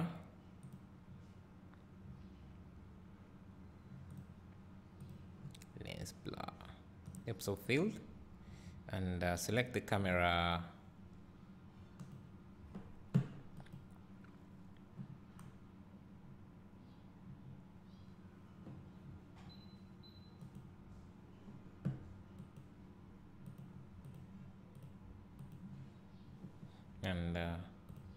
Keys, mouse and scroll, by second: 16.0-16.8 scroll down 1, 17.2-19.7 scroll up 1, 20.6 click, 23.0 click, 24.3 click, 24.9 click, 25.6 click.